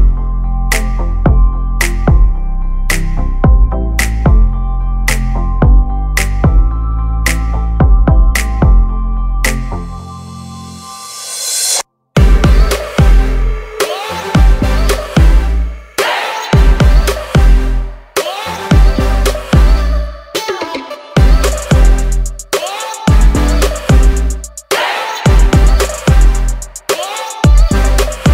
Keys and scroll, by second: 0.9 space, 1.8 s, 6.6 space, 7.6 Delete, 8.1 p, 9.1 space, 13.2 m, 16.5 Right, 16.8 Left, 19.7 Right, 23.4 s, 24.8 space, 24.9 Escape, 26.6 r, 27.8 space, 28.1 p.